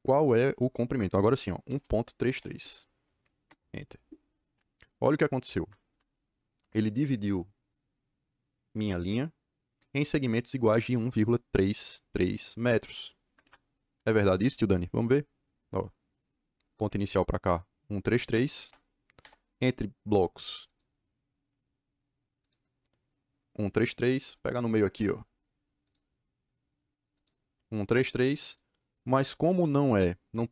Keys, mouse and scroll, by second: 1.6 KP_1, 2.1 KP_3, 2.3 KP_3, 3.4 KP_Enter, 5.5 Escape, 5.7 Escape, 13.2 Escape, 13.3 Escape, 13.9 d, 14.2 Return, 16.6 click, 18.5 Return, 19.1 Return, 19.4 click, 20.6 click, 22.3 click, 24.8 Return, 25.7 click, 27.0 click.